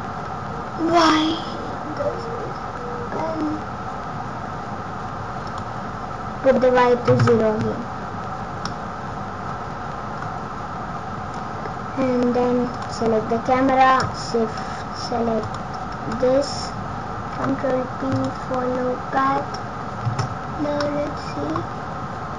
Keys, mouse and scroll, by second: 5.4 click, 8.6 middle click, 12.6 click, 15.4 shift+click, 17.3 ctrl+p, 20.0 space, 20.7 middle click, 21.6 scroll down 1.